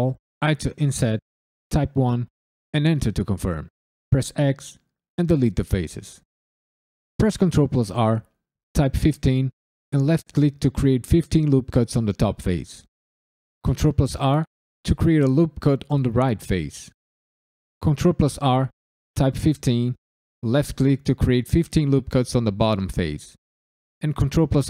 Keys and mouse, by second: 0.4 i, 1.7 KP_1, 2.7 KP_Enter, 4.1 x, 7.1 ctrl+r, 9.0 1, 9.5 5, 9.9 click, 10.2 right click, 13.6 ctrl+r, 15.0 click, 15.3 right click, 17.8 ctrl+r, 19.3 1, 19.8 5, 20.3 click, 20.7 right click, 24.1 ctrl+r.